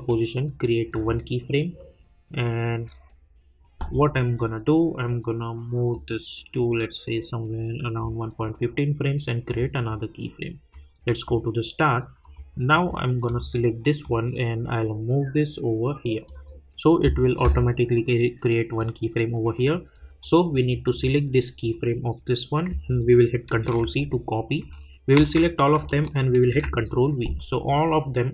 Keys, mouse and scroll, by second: 0.9 click, 20.2-23.4 drag, 23.4 ctrl+c, 25.2 ctrl+a.